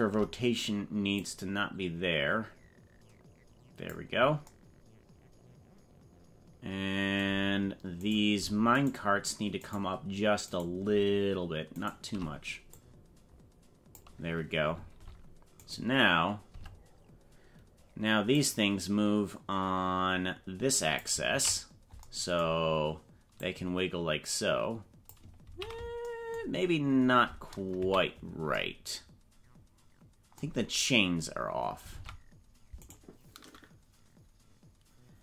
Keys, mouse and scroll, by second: 1.2-3.8 drag, 8.0 right click, 8.8 shift+right click, 9.6 shift+right click, 10.6 right click, 11.8 shift+right click, 12.8-14.0 drag, 15.0 ctrl+Tab, 15.5 right click, 16.6 Tab, 18.4-21.0 drag, 21.4 ctrl+z, 23.4-25.1 drag, 25.7 ctrl+z, 26.8 scroll up 4, 27.7 KP_Decimal, 31.3-31.7 scroll down 4, 31.9 ctrl+Tab, 32.8 right click.